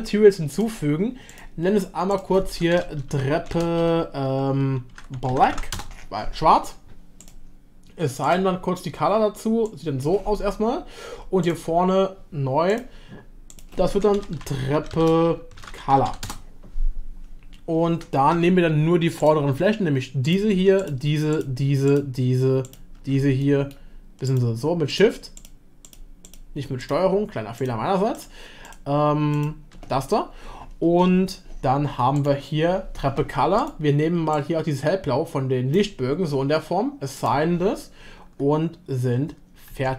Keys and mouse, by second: 0.5 click, 2.1-6.2 shift+drag, 7.2 click, 11.5-12.9 drag, 13.5-16.8 drag, 19.2-20.2 drag, 23.5 middle click, 24.9 shift+click, 26.8 shift+click, 27.6 shift+click, 28.6 shift+click, 29.3 shift+click, 32.1 click, 33.6 click, 37.2-39.7 drag, 39.7 Tab.